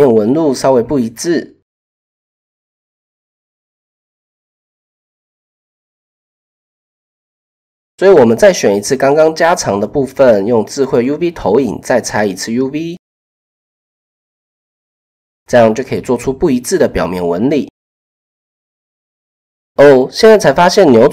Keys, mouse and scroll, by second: 2.7-3.5 typing, 6.8 click, 7.2 click, 7.7 click, 8.7 click, 8.9-9.6 drag, 10.2 click, 11.3 u, 15.4 Tab, 18.2 shift+middle click, 18.2 typing.